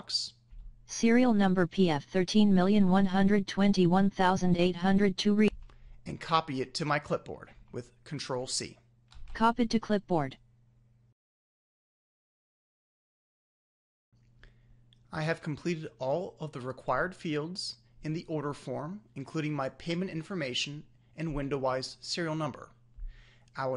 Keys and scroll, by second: 8.2 ctrl+c.